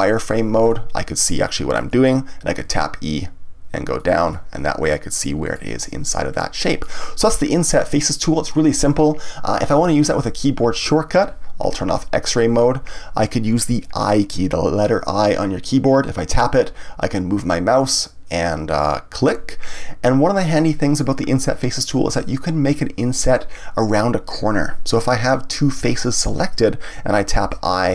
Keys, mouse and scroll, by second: 0.1 click, 0.6-2.5 middle drag, 2.5 e, 4.0 click, 4.3-9.4 middle drag, 9.8 ctrl+z, 12.2 click, 19.2 click, 25.1 ctrl+z, 25.9 shift+click, 27.4 i.